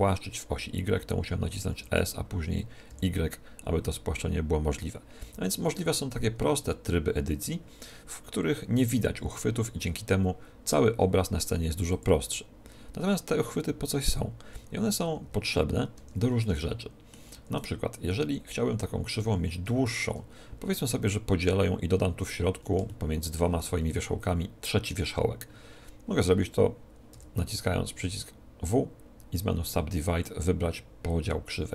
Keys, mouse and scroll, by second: 1.6 s, 11.8-13.6 drag, 15.0 Tab, 15.6-18.3 middle drag, 15.9 Tab, 18.3-19.4 right drag, 19.8-21.8 right drag, 22.8-27.1 middle drag, 27.1 w.